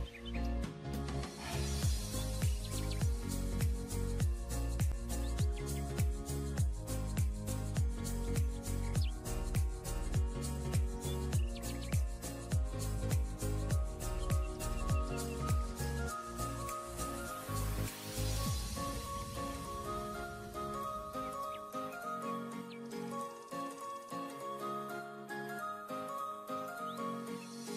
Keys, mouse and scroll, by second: 2.8 alt+click, 4.4 alt+scroll down 1, 5.2 alt+click, 6.1-6.8 alt+scroll down 5, 7.4-8.0 ], 9.4-9.8 alt+scroll up 1, 11.3-11.7 alt+scroll down 1, 12.1-12.8 alt+scroll up 1, 12.9 alt+scroll up 2, 14.1 scroll down 1, 16.3-16.9 scroll down 2, 19.4-19.9 alt+scroll up 1, 20.3 alt+click, 26.3 alt+click.